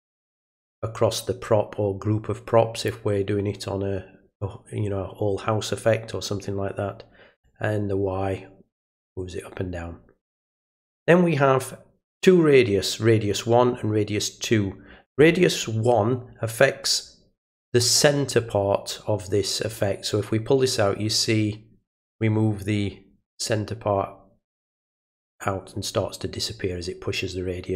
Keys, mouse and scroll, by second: 7.4-10.2 drag, 19.7-27.7 drag.